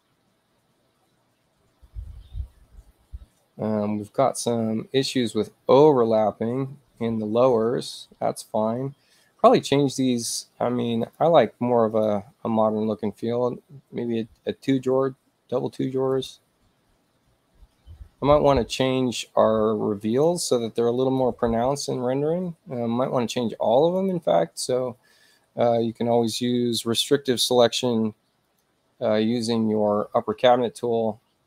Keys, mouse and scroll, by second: 11.0 click, 11.9 click, 16.1 click, 19.4 space, 20.1 click, 21.0 ctrl+click, 24.0 click, 28.5 click.